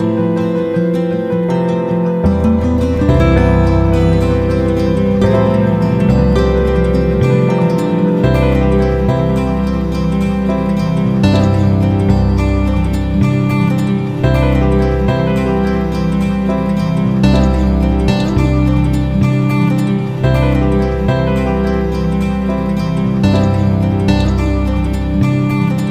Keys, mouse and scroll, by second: 1.7 ctrl+z, 2.5 shift+click, 3.2 ctrl+z, 3.9-6.5 ctrl+shift+drag, 7.9 shift+click, 9.1-10.1 shift+drag, 10.3-12.4 shift+drag, 12.8 click, 21.0-25.9 drag.